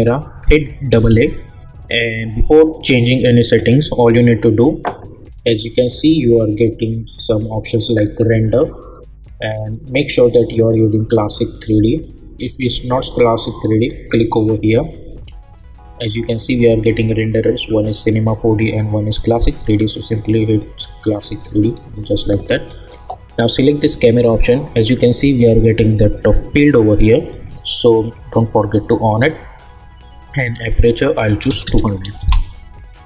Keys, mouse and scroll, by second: 0.9 typing, 7.8 click, 14.0 click, 20.1 click, 27.4 click, 30.7 click, 32.2 Return.